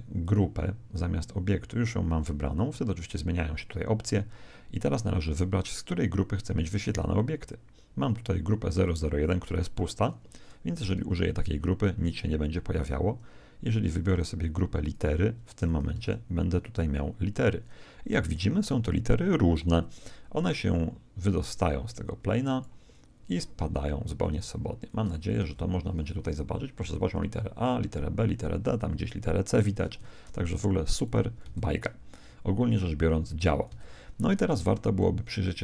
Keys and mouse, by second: 0.2 click, 6.7 click, 10.9 alt+a, 12.4 Escape, 13.9 click, 15.9 alt+a, 21.4 click, 25.4 alt+a, 29.9 Escape, 31.0 click, 31.4 alt+a, 34.9-35.6 middle drag.